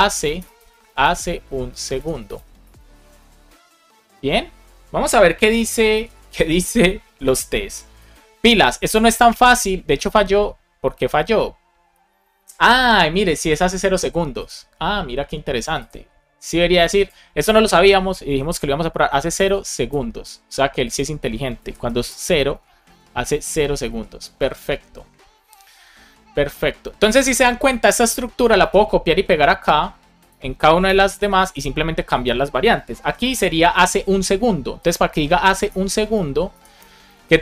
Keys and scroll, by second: 0.0-1.0 typing, 2.6 BackSpace, 4.0 super+s, 5.4 alt+shift+f, 5.9 super+s, 18.2 BackSpace, 19.4 alt+Right, 21.5 Right, 21.8 BackSpace, 22.4 Right, 23.8 super+s, 28.5 super+c, 30.8 Return, 31.4 super+v, 32.9 alt+shift+f, 35.3 Left, 35.6 BackSpace, 36.0 super+Right, 36.4 Left, 36.8 BackSpace, 37.1 super+s.